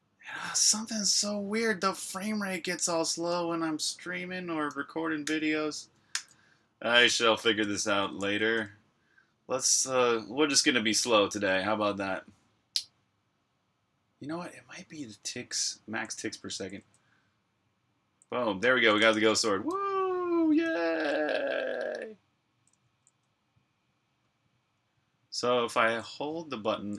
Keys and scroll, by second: 0.0-0.2 typing, 1.6-3.0 typing, 5.2-8.3 typing, 16.2-19.1 typing, 20.1-21.2 typing, 22.7-25.6 typing.